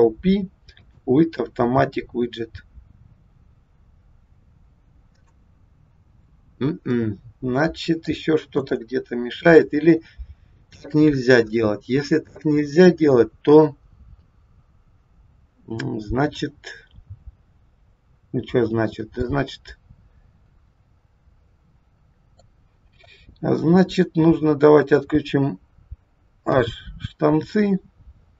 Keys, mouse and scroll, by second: 6.9 middle click, 8.4 KP_1, 9.1-9.9 scroll up 1, 9.9 scroll down 2, 10.3-10.8 scroll up 1, 15.8-16.5 scroll up 1, 17.8-18.6 scroll down 1, 19.2 middle click, 22.8-23.5 scroll down 1, 23.7 click, 26.5 h.